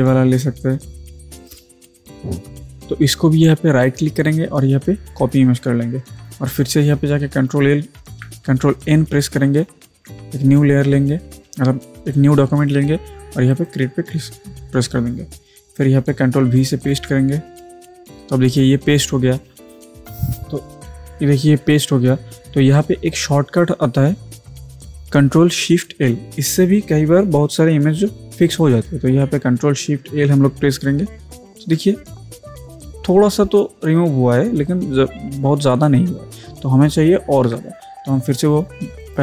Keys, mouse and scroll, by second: 1.4 click, 3.9 right click, 5.2 click, 9.9 ctrl+n, 13.5 click, 13.7 click, 16.9 ctrl+v, 18.5 click, 29.5 ctrl+Num_Lock, 31.1 ctrl+shift+l, 37.4 ctrl+z, 39.1 right click.